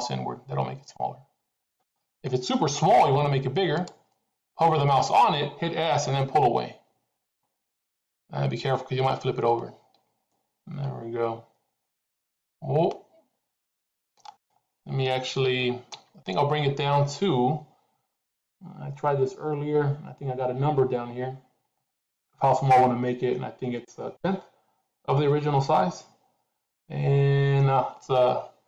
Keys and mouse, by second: 2.9 s, 5.8 s, 15.4 ctrl+z, 15.8 ctrl+z.